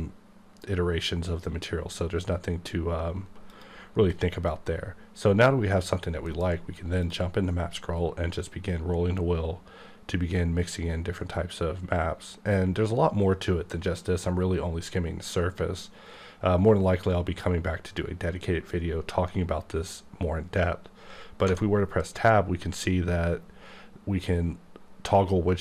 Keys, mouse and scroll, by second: 0.4-1.0 scroll up 1, 1.0-2.1 scroll up 1, 2.1-3.5 scroll down 2, 3.5 click, 6.3 alt+m, 7.0 click, 7.8-8.6 scroll up 2, 10.5-11.5 scroll up 3, 11.5-12.6 scroll up 2, 12.6-13.8 scroll up 1, 13.8 scroll up 1, 15.1-16.9 scroll up 2, 21.4 Tab.